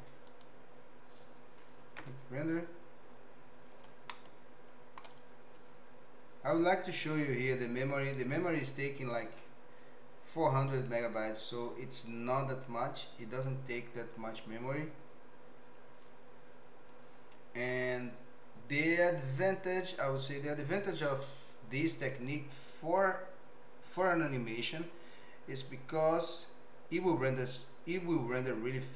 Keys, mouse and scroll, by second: 2.1 F12, 4.1 shift+middle click, 28.5 click.